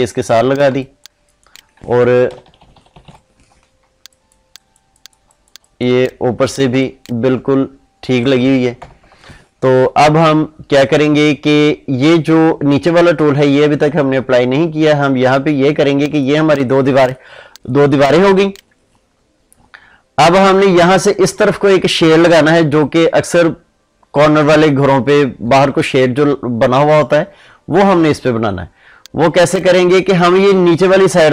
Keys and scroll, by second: 2.2 ctrl+-, 6.6 ctrl+space, 8.7 ctrl+0.